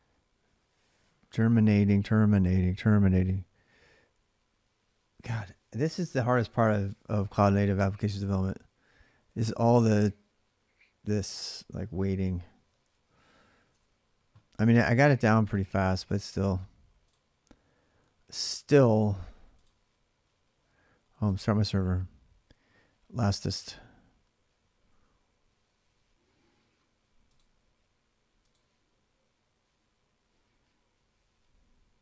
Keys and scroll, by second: 13.5 alt+Tab.